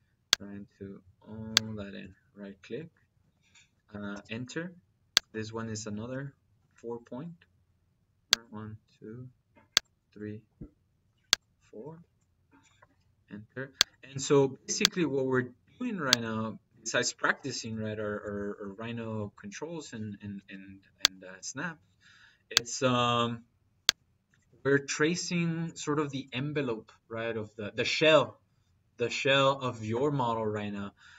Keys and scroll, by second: 12.6 -, 20.2 -.